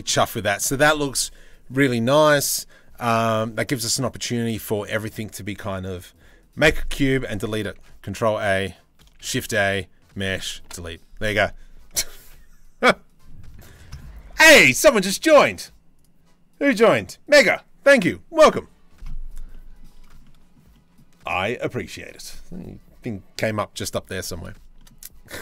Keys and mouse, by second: 7.3 ctrl+a, 8.8 shift+a, 10.3 Delete, 19.1 middle click, 19.8 middle click, 20.3 middle click, 23.8 middle click, 24.4-25.4 shift+middle drag.